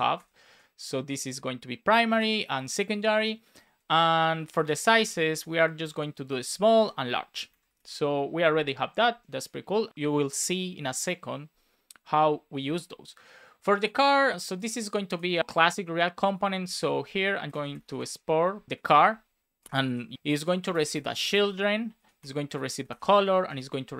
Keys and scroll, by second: 0.4 Down, 1.2 space, 2.1 BackSpace, 4.5 shift+i, 4.6 shift+space, 5.4 Right, 5.8 space, 6.6 shift+1, 6.7 space, 7.2 Right, 7.7 super+s, 17.4 Return, 17.5 space, 19.5 space, 19.8 shift+9, 22.1 Return.